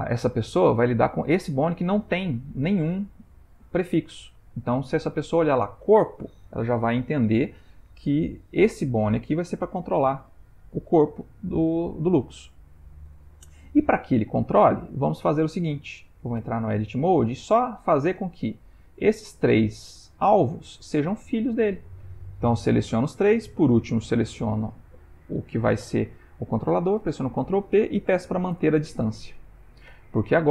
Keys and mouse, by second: 0.6 click, 8.7 g, 16.5 Tab, 18.4 click, 19.4 shift+click, 20.4 click, 21.4 shift+click, 27.0 ctrl+p, 30.0 Tab.